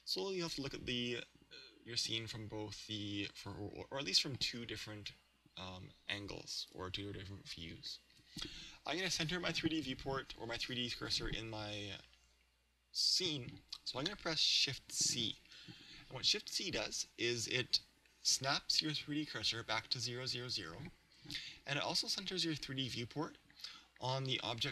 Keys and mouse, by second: 0.6 KP_3, 4.4 KP_1, 5.0 KP_3, 6.6 KP_1.